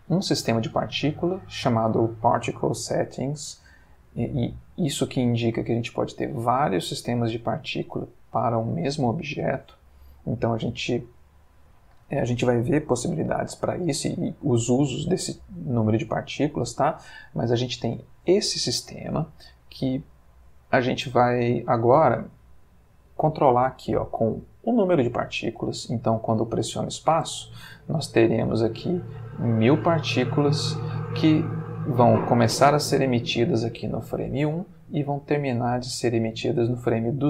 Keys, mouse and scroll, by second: 14.0-15.1 middle drag, 15.1-15.5 scroll up 1, 16.2-17.0 middle drag, 17.0-19.5 scroll up 1, 19.5-20.9 scroll up 1, 27.2 space.